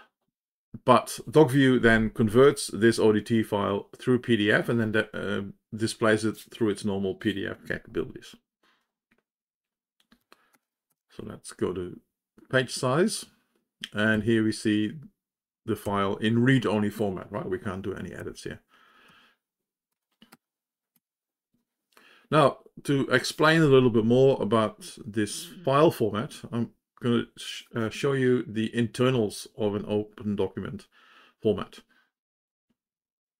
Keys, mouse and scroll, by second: 12.4 shift+p, 15.4 Page_Down, 16.2 Page_Down, 19.6 Page_Down, 20.8 Page_Up, 21.9 Page_Up.